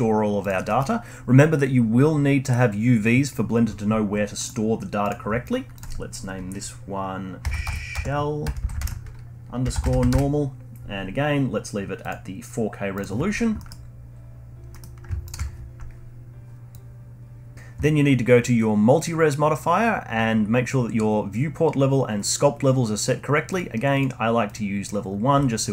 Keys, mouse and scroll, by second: 0.7-3.7 middle drag, 4.0-4.4 scroll up 1, 4.4-5.0 middle drag, 5.0-8.1 drag, 8.6 l, 13.4 scroll down 1, 13.6-14.1 middle drag, 14.1-14.7 scroll down 3, 14.7-15.3 middle drag, 15.3 ctrl+shift+click, 16.7-18.3 drag, 23.5-25.6 drag, 25.6 alt+middle drag.